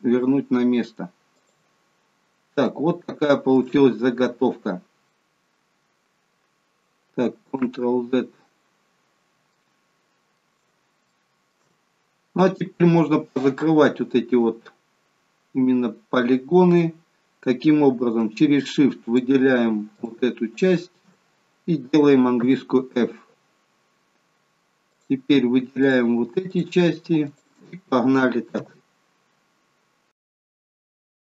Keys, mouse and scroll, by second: 1.9-2.3 scroll down 3, 2.7 shift+middle click, 4.0-5.1 scroll down 1, 7.5 ctrl+z, 9.6 shift+middle click, 11.8-12.9 scroll up 3, 19.1 shift+click, 19.9 shift+click, 20.6 shift+click, 22.5 f, 25.0 click, 25.8 shift+click, 26.5 shift+click, 27.2 shift+click, 28.6 f, 30.2 click, 30.4 shift+click, 30.5 shift+click, 30.7 shift+click, 31.0 f.